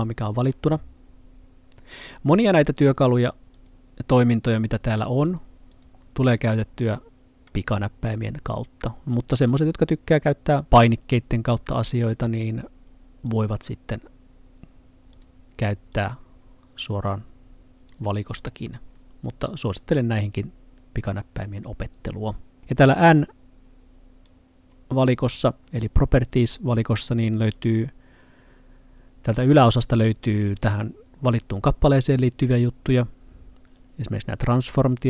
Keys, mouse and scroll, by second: 3.6 click, 13.3 click, 24.3 click.